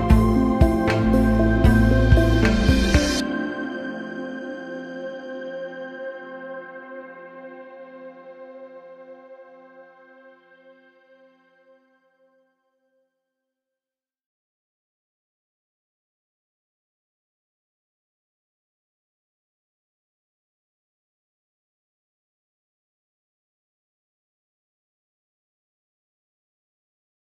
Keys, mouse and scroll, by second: 3.3 click, 5.0 click, 6.9 click, 9.3-10.9 drag, 14.6 click, 17.5 click, 20.3 click, 23.6-26.1 drag.